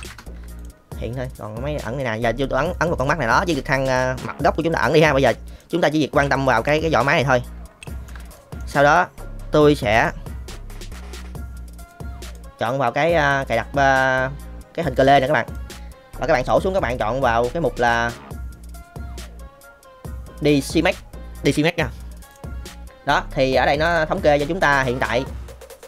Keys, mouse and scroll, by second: 0.0 ctrl+space, 2.7 click, 3.2 middle click, 4.2-4.8 middle drag, 5.5-6.5 drag, 6.5 KP_Decimal, 7.8 shift+middle drag, 8.3 middle click, 9.9 n, 12.0 click, 15.4 click, 16.4-22.3 drag.